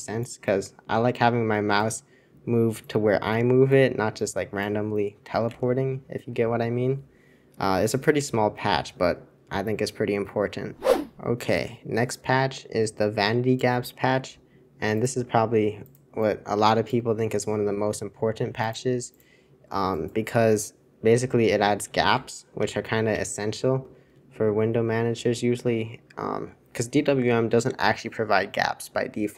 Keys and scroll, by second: 5.6 super+2, 22.2 super+1, 22.6 super+Return, 23.1 super+Return, 23.7 super+Return.